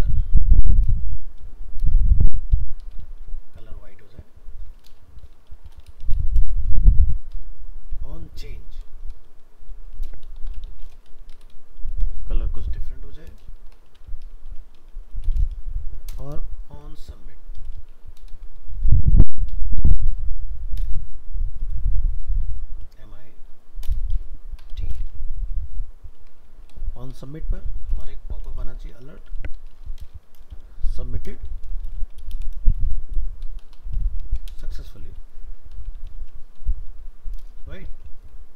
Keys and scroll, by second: 6.6 ctrl+v, 16.8 ctrl+v.